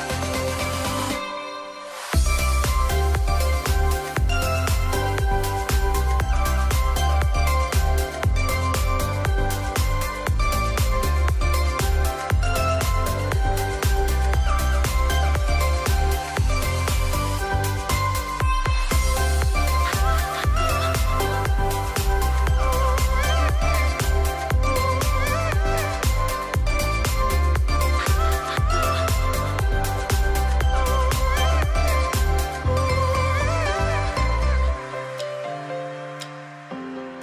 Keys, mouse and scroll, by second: 1.1-1.7 alt+right drag, 4.5-6.4 drag, 11.6 click, 14.0-16.6 drag, 19.4 ctrl+t, 20.1-25.2 drag, 28.1 Return, 29.2-36.2 drag.